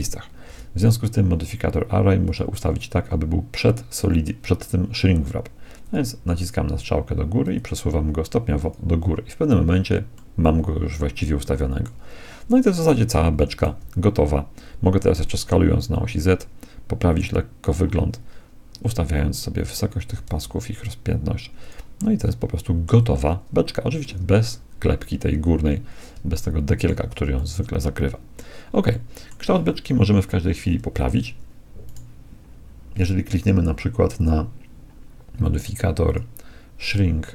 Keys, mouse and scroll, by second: 0.4 z, 2.2-4.1 drag, 5.8-10.3 drag, 10.3-12.0 middle drag, 13.4 s, 18.8-20.5 drag, 20.1 s, 22.0-25.8 middle drag, 26.4-30.4 middle drag, 30.2 KP_1, 31.9-33.8 right drag, 34.2-36.0 drag, 36.2-37.3 drag.